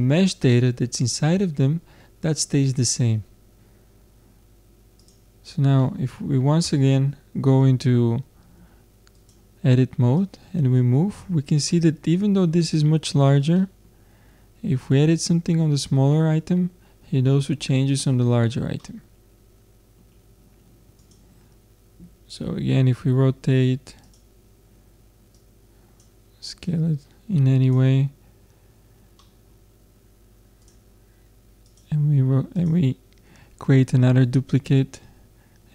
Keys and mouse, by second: 5.1-6.9 drag, 8.4 Tab, 9.2-12.0 drag, 12.0-15.3 middle drag, 18.2 Tab, 21.0-22.8 drag, 22.4 r, 25.4-28.5 drag, 29.2-30.6 middle drag, 30.6-33.4 drag.